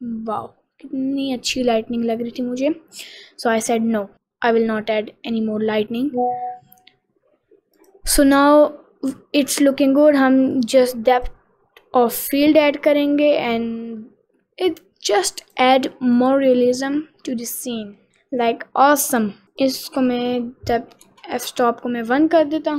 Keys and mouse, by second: 7.9 click, 9.9 click, 10.8 click, 11.6 click, 15.6 click, 18.1-19.2 drag, 19.6-21.6 drag.